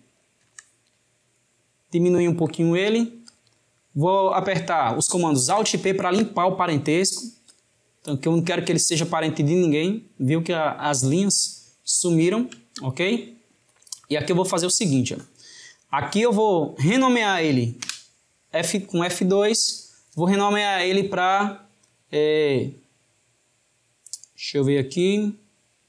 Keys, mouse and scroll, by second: 5.4 alt+p, 11.9-17.1 ctrl+middle drag.